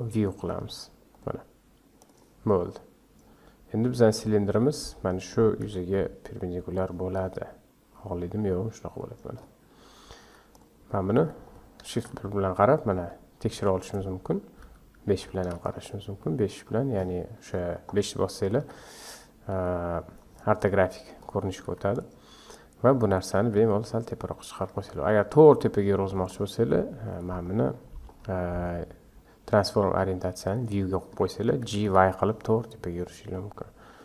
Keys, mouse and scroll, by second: 2.6 scroll down 3, 3.2 scroll down 4, 3.8-4.2 scroll up 7, 4.5 Tab, 5.1 scroll down 3, 5.6 s, 7.2 s, 9.4-10.2 scroll up 4, 10.2 Tab, 10.5 click, 11.1 Tab, 11.9 shift+KP_1, 12.7-13.6 scroll up 5, 13.6 scroll down 1, 14.6 scroll down 2, 14.6 KP_5, 16.1 shift+z, 16.6 scroll up 2, 17.7-18.6 scroll down 4, 18.6 KP_5, 19.5 KP_5, 20.9-21.2 scroll down 1, 21.2-21.7 scroll up 1, 21.7 Tab, 21.9 click, 22.5 scroll up 1, 23.4 g, 27.1-30.3 drag, 31.6 g.